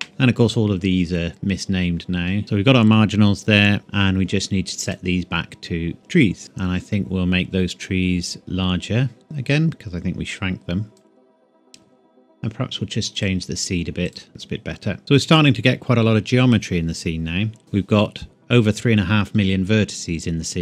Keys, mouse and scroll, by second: 0.0 KP_Enter, 2.4-3.8 scroll down 2, 3.8 click, 8.4 click, 13.1 click, 15.0 ctrl+s.